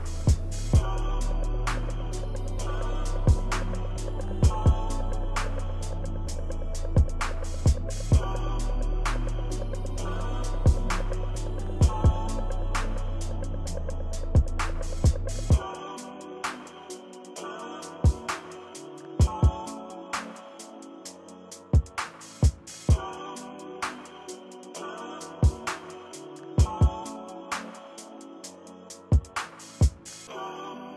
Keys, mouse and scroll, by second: 1.0 shift+click, 1.7 shift+click, 2.0 click, 2.1 click, 2.3 ctrl+middle click, 2.4 ctrl+=, 3.1 click, 3.2 click, 3.7 click, 3.8 click, 4.0 click, 4.3 ctrl+z, 4.3 click, 4.6 click, 5.0 ctrl+-, 5.1 ctrl+=, 5.4 click, 6.6 shift+click, 6.8 shift+click, 7.2 ctrl+-, 7.5 click, 7.8 ctrl+click, 8.1 click, 8.2 shift+click, 8.6 shift+click, 8.7 shift+click, 9.4 click, 9.4 ctrl+-, 9.6 ctrl+=, 11.0 click, 11.1 ctrl+-, 11.2 ctrl+=, 11.4 ctrl+=, 11.8 shift+click, 12.3 shift+click, 12.7 shift+click, 12.8 shift+click, 13.0 ctrl+=, 13.0 ctrl+middle click, 13.2 shift+click, 13.6 click, 13.7 ctrl+scroll down 2, 13.8 ctrl+=, 14.0 shift+click, 14.2 click, 14.3 click, 14.4 ctrl+-, 14.5 ctrl+=, 14.5 scroll up 2, 14.7 click, 15.0 shift+right click, 15.1 shift+click, 15.3 shift+click, 15.7 click, 16.1 click, 16.8 shift+click, 17.1 shift+click, 17.7 click, 18.9 click, 19.1 click, 19.2 click, 19.9 click, 20.3 shift+click, 20.6 ctrl+=, 20.8 click, 20.9 click, 21.0 ctrl+=, 21.2 scroll up 2, 21.4 shift+click, 22.2 ctrl+-, 22.5 ctrl+=, 22.7 click, 22.8 click, 23.0 shift+click, 23.2 click, 23.4 click, 23.5 click, 23.8 click, 23.9 ctrl+-, 24.1 click, 24.3 click, 24.6 click, 25.8 ctrl+-, 26.0 ctrl+=, 26.1 ctrl+=, 27.3 ctrl+=, 27.3 ctrl+scroll up 1, 27.5 click, 27.7 shift+click, 27.8 click, 27.9 ctrl+-, 28.2 click, 28.4 ctrl+-, 28.5 middle click, 28.7 ctrl+=, 30.2 ctrl+-, 30.5 ctrl+-.